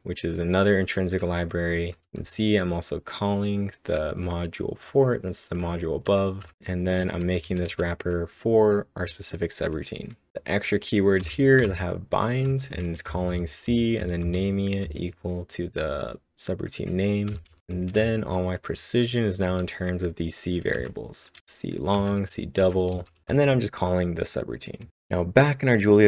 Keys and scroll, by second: 6.7-7.7 typing, 10.0-10.8 typing, 18.9-21.3 typing, 24.8-25.5 typing.